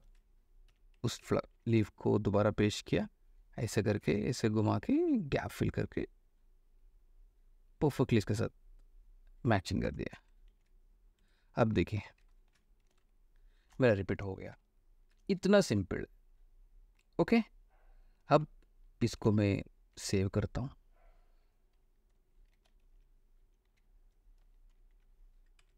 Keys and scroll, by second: 0.2 ctrl+v, 0.9 ctrl+v, 1.7 ctrl+t, 10.0 Return, 10.7 t, 11.4 Escape, 12.7 e, 13.0 space, 14.7 space, 18.5 space, 19.4 ctrl+alt+space, 20.1 ctrl+alt+s, 22.5-25.7 typing.